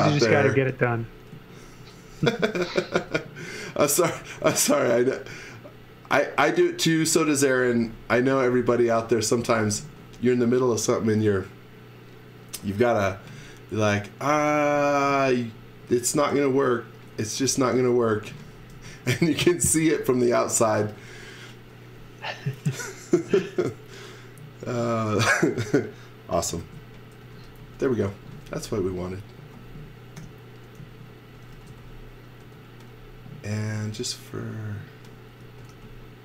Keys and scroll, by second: 0.0-2.9 typing, 3.9 space, 4.1 s, 7.2-9.8 typing, 10.8 z, 12.6 m, 14.4 space, 14.7 s, 17.1-20.8 typing, 25.1 space, 26.6-28.9 typing, 30.2-32.4 typing, 33.4 space, 35.4 x, 35.7 v.